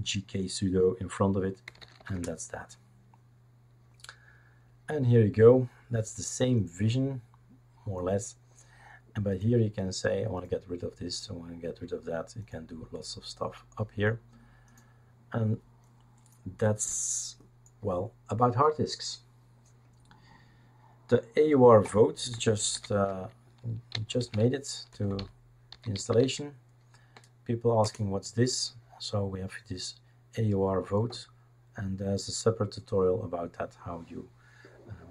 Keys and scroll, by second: 1.4-2.4 typing, 22.7 ctrl+alt+t, 23.6-26.4 typing, 27.8 Return.